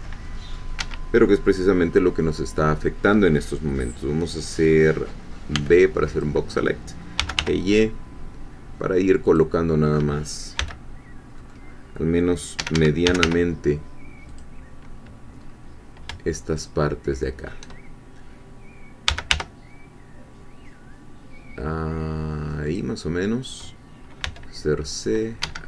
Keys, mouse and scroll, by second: 0.8 Escape, 5.5 b, 5.7-7.2 drag, 6.9-7.8 typing, 9.3-10.6 drag, 10.6 c, 11.4 middle click, 12.6 Escape, 12.8-13.7 typing, 14.3-15.4 drag, 15.4 scroll up 1, 16.5 shift+click, 18.8-19.8 typing, 22.7-24.2 drag, 24.2 c, 25.1 middle click, 25.4 Escape.